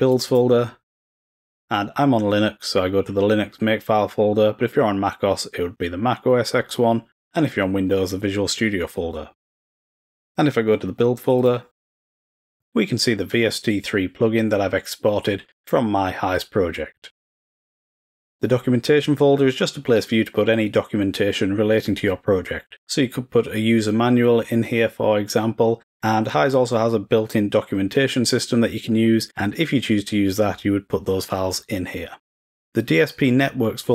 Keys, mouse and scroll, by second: 0.0 click, 9.8 click, 11.3 click, 12.5 click, 12.7 click, 19.4 click, 33.2 click.